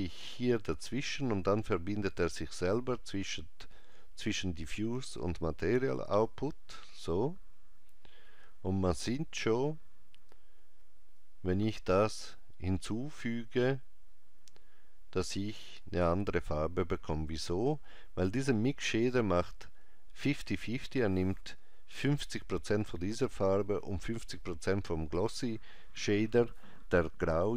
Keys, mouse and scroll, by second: 6.3 click, 11.2 click.